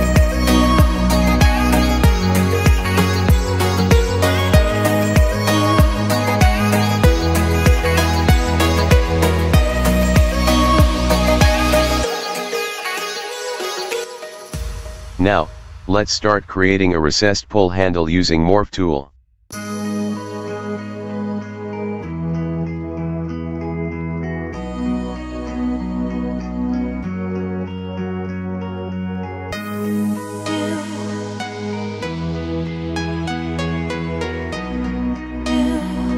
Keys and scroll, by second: 1.1 2, 1.2 Return, 1.8 Escape, 4.1 1, 4.2 Return, 4.5 Escape, 8.1 Escape, 10.7 Escape.